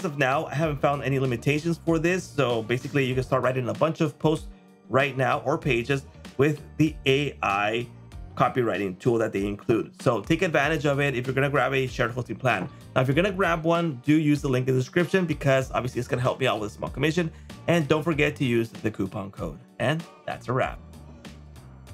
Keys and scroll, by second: 9.3 super+m.